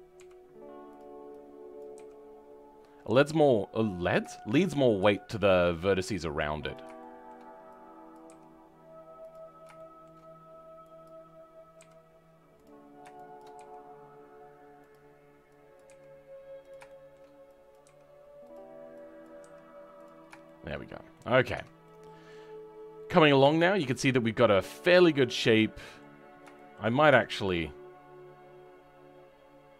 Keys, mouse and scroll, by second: 0.1 g, 1.7 click, 1.8 g, 4.0 click, 4.9 g, 6.9 shift+middle click, 8.0 click, 8.2 g, 9.5 scroll down 2, 9.7 shift+middle click, 11.0-13.5 drag, 13.5 g, 15.7 click, 16.8 right click, 16.8 shift+middle click, 17.6 click, 17.8 g, 19.1 click, 19.3 g, 20.1 scroll down 3, 20.4 shift+middle click, 20.7-21.0 scroll down 4, 21.0 middle click, 21.5 Tab, 22.6-26.1 middle drag, 26.1-26.5 scroll up 4, 26.5 shift+middle click, 27.0 Tab, 27.3-27.6 scroll up 2.